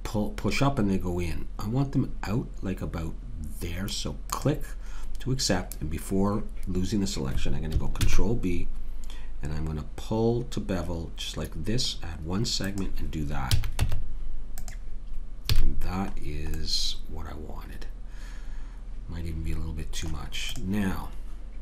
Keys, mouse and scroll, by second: 8.0 ctrl+b, 13.6 a, 13.8 Tab, 15.5 a, 15.8-17.2 middle drag, 19.4 middle click, 20.5-21.6 drag.